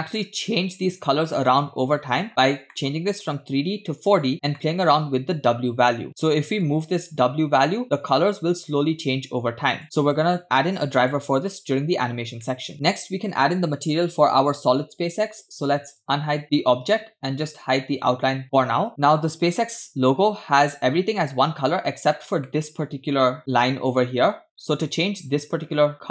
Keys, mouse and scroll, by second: 0.4-0.9 scroll up 3, 2.3-2.7 scroll up 2, 2.7 middle click, 3.2-4.3 drag, 4.6 middle click, 6.1 scroll down 1, 6.7-9.8 shift+drag, 10.0-11.1 drag, 12.4 scroll down 2, 12.5 middle click, 16.2 click, 18.2 click, 20.2-20.7 scroll up 2, 22.5-22.9 shift+middle drag.